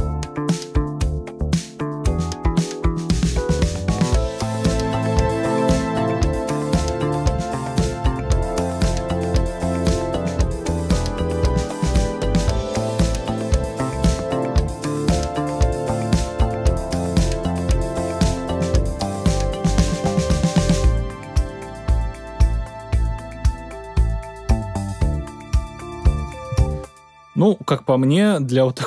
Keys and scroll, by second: 26.4 space.